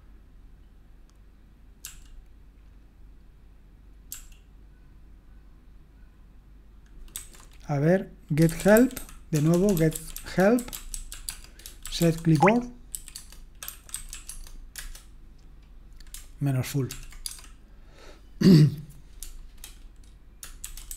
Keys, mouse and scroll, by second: 1.8 ctrl+p, 4.1 ctrl+p, 7.1 ctrl+c, 8.2-15.2 typing, 16.9 ctrl+p, 17.2 space, 20.4-20.9 typing.